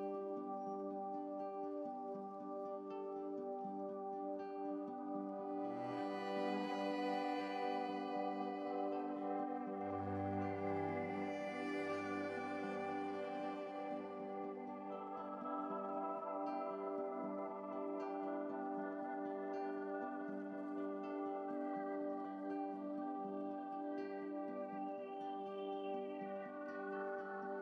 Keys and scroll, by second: 5.8 ctrl+z, 18.0 Right, 19.4 Right, 19.6 Right, 19.8 Right, 20.2-20.8 Right, 20.8 ctrl+z, 21.0 ctrl+z, 21.3 ctrl+z.